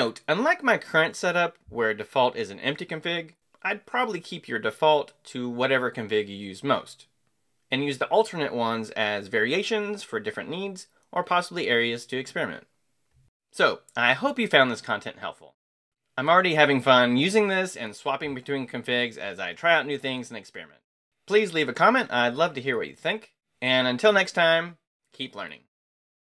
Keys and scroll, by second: 0.9 Escape, 1.0-1.9 typing.